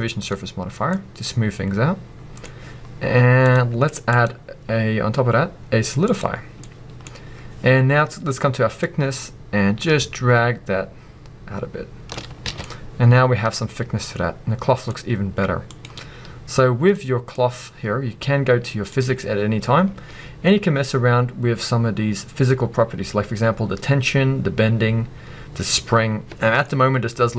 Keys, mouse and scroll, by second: 0.9 scroll up 2, 0.9-3.5 middle drag, 3.5-6.6 drag, 6.6-8.8 middle drag, 7.0-8.8 scroll up 2, 8.8-12.6 drag, 12.3 scroll down 1, 12.5 alt+a, 12.6-15.7 middle drag, 15.7 click, 16.9-18.9 middle drag, 18.9 click, 19.8-20.6 scroll down 2, 20.6-23.8 scroll down 1, 25.9-26.3 scroll down 2, 26.3-27.3 middle drag, 26.6-27.3 scroll up 2.